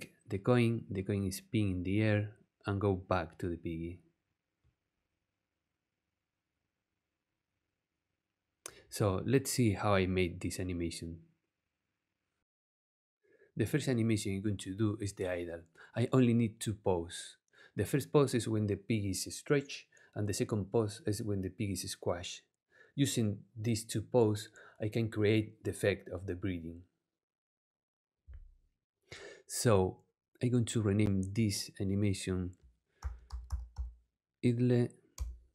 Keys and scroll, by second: 32.7-34.2 typing, 35.1 Return.